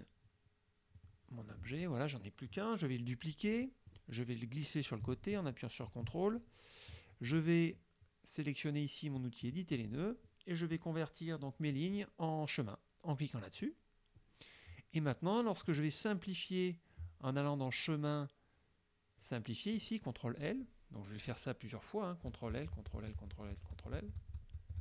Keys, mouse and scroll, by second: 1.0 click, 1.9 middle click, 3.5 click, 4.0-6.1 drag, 6.4 ctrl+middle click, 9.2 click, 13.5 click, 15.7 click, 19.8 click, 22.6 ctrl+l.